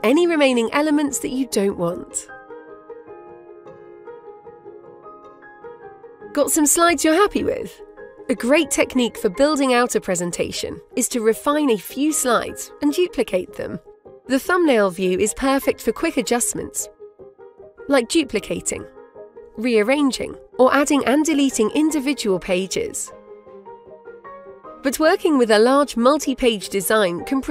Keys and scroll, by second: 22.1 Delete.